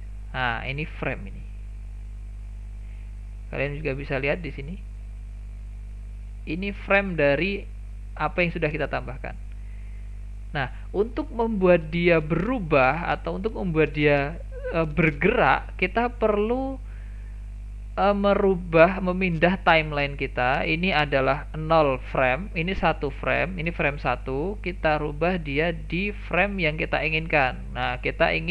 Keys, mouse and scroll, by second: 0.4-2.9 scroll up 1, 2.9 scroll up 1, 3.8 click, 4.9 click, 5.7 click, 6.1 click, 18.5-21.5 drag, 21.6-25.9 drag, 25.9-26.5 scroll down 5, 26.5 shift+middle click, 27.0-28.0 scroll down 2, 28.0-28.5 scroll down 1.